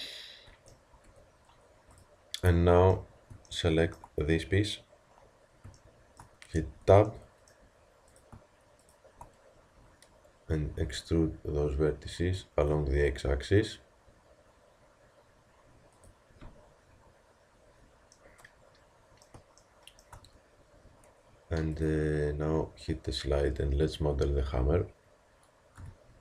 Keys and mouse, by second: 1.1 Tab, 6.6 Tab, 10.8 e, 20.8 Tab, 25.8 KP_3.